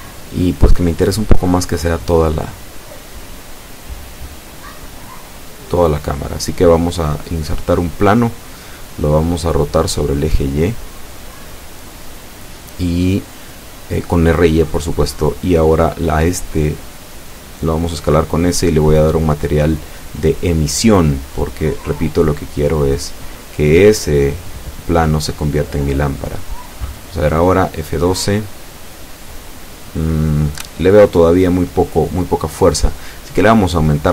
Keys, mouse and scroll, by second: 8.3 Escape, 9.3-10.1 middle drag, 10.6 x, 10.8 click, 11.5 shift+a, 12.6 click, 13.8 click, 15.5 click, 16.2-17.3 middle drag, 19.9 r, 20.1 y, 21.8 click, 22.3-23.6 middle drag, 24.2 s, 26.1 click, 27.1 click, 28.8 click, 32.7 click, 33.7-34.1 middle drag.